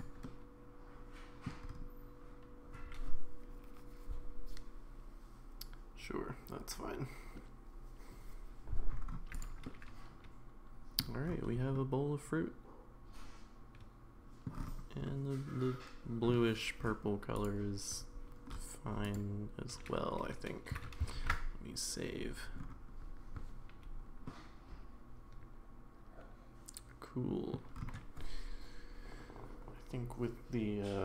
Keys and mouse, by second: 0.3-1.5 middle drag, 9.4 drag, 9.6-11.0 middle drag, 11.7-14.5 middle drag, 15.1-16.3 middle drag, 21.2 ctrl+s, 24.3-27.5 middle drag.